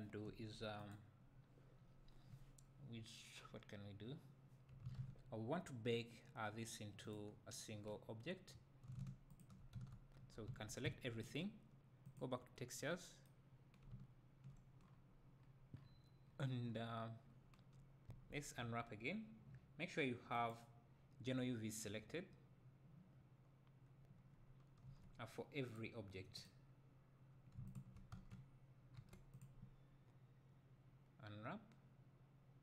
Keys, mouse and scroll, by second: 0.9 click, 9.4 shift+click, 9.8 Tab, 10.5 a, 12.1 click, 18.1 a, 20.4 click, 22.0-23.5 scroll down 2, 25.0 Tab, 25.8 click, 27.8 shift+click, 28.2 Tab.